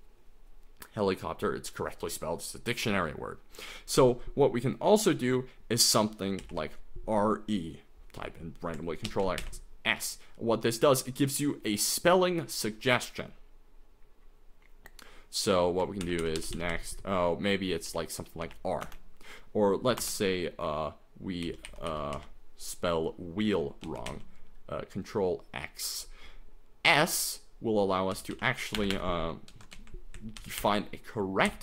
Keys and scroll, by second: 6.2-6.9 typing, 9.1 ctrl+x, 9.4 s, 16.1 ctrl+n, 16.2 ctrl+n, 16.4 ctrl+n, 16.5 ctrl+n, 16.7 ctrl+n, 17.7 ctrl+p, 18.0 ctrl+p, 18.4 ctrl+p, 18.8 Return, 20.0 Return, 21.2-22.6 typing, 23.9 ctrl+x, 24.1 ctrl+s, 28.1 n, 28.3 n, 29.5 ctrl+x, 29.7 s, 30.4 ctrl+n, 30.6 ctrl+n, 31.5 ctrl+n.